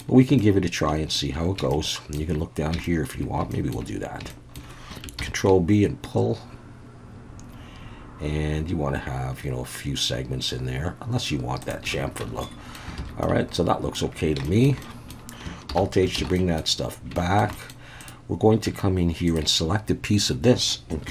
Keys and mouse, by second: 0.4 shift+middle click, 1.7 shift+middle click, 2.8 shift+middle click, 3.5 shift+middle click, 4.3 shift+middle click, 5.2 ctrl+b, 11.6 shift+click, 12.2 Tab, 12.4-12.7 middle drag, 13.0 alt+a, 13.2-13.9 middle drag, 14.4 shift+middle drag, 14.8 middle drag, 15.7 alt+h, 16.2 alt+a, 16.3 middle drag, 17.1 shift+middle drag, 17.5 middle click, 18.7 Tab, 19.3 click.